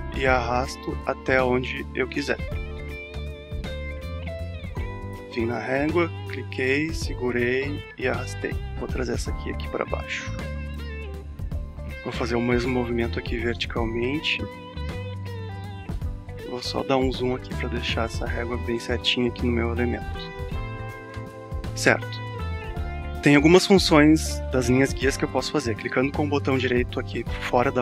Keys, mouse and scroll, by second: 2.2-7.4 drag, 7.7-16.4 drag, 16.4-16.8 alt+scroll up 1, 22.7-23.0 scroll down 2, 26.0 click.